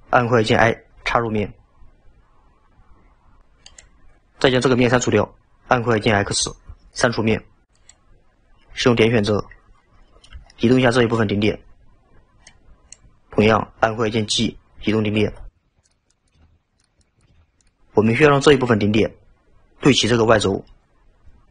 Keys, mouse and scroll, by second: 6.3 x, 9.3 1, 9.8 scroll up 3, 10.5 shift+middle drag, 12.5 click, 16.2 click, 17.1 click, 18.2-20.6 scroll down 3.